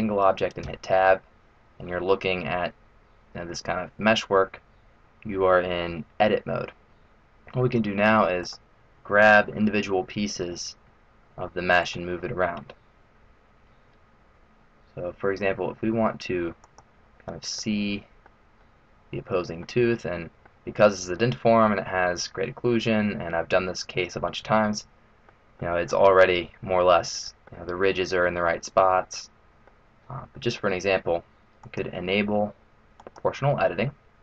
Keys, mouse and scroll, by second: 0.6 Tab, 3.9 middle click, 8.4 right click, 10.5 g, 16.6 click, 17.6 middle click, 18.6 middle click, 19.9 middle click, 20.9-21.5 scroll up 3, 22.1 middle click, 25.6 middle click, 27.0 middle click, 28.3 middle click, 30.3 middle click, 31.6 click, 33.9-34.2 scroll down 1.